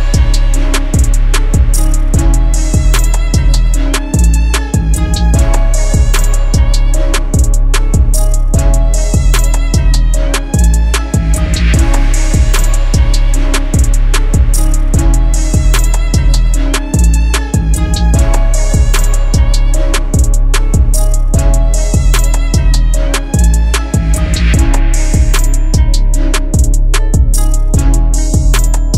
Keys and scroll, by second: 21.4 1, 22.5 /, 23.0 1, 23.9 Return.